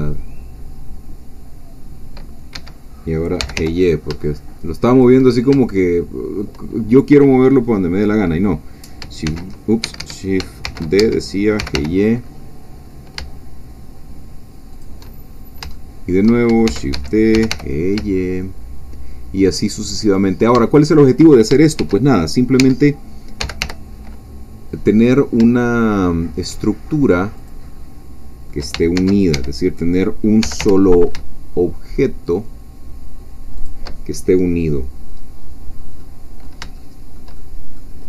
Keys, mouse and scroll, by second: 2.5 Escape, 3.4 g, 3.6 y, 4.1 shift+y, 4.9 shift+click, 5.3 shift+scroll down 2, 5.6 shift+middle click, 9.2 shift+s, 9.8 Escape, 10.6 shift+d, 11.0 Escape, 11.6 shift+g, 11.7 y, 14.7 shift+click, 15.3 shift+scroll up 2, 15.7 shift+middle click, 16.7 shift+d, 16.9 Escape, 17.3 g, 17.5 y, 20.1 shift+click, 20.7 shift+middle click, 21.3-21.8 shift+scroll up 1, 21.8 shift+scroll up 1, 21.8 shift+d, 22.6 Escape, 23.4 g, 23.6 y, 27.3 shift+click, 27.8 shift+middle click, 28.7-30.4 shift+scroll down 2, 29.0 shift+d, 29.3 Escape, 30.4-31.1 scroll down 1, 30.4 g, 30.6 y, 31.1-32.2 shift+scroll down 1, 33.6 shift+click, 35.5-36.0 scroll down 2, 36.0 middle click, 36.8 shift+middle click, 37.4 shift+middle click.